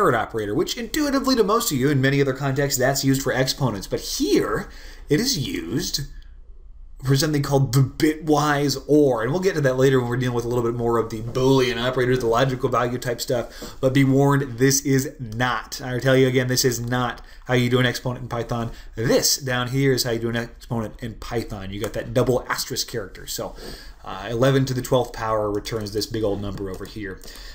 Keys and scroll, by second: 0.0-0.4 typing, 19.5-20.3 typing.